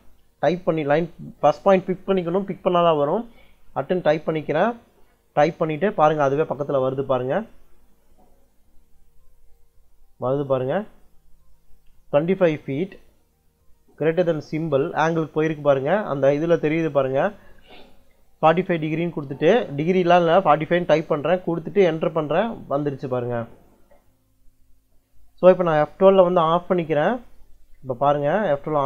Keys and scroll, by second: 4.1 shift+2, 8.8 shift+2, 12.0 2, 12.7 ', 14.4 shift+,, 18.3-19.2 typing, 22.6 Return, 25.6 F12, 27.6 Escape, 28.3 F12.